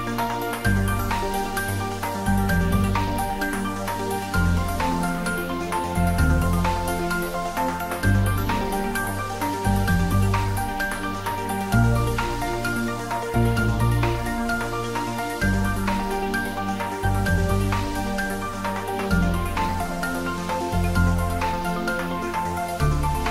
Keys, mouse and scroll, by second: 0.6 click, 1.8-2.3 scroll up 1, 2.3-2.9 middle click, 3.4 click, 3.8 scroll up 1, 6.2 click, 7.7 g, 8.2 Up, 14.0 Return, 15.6-20.0 middle drag, 21.0 click, 21.4-21.8 scroll down 1, 21.8-23.3 middle drag.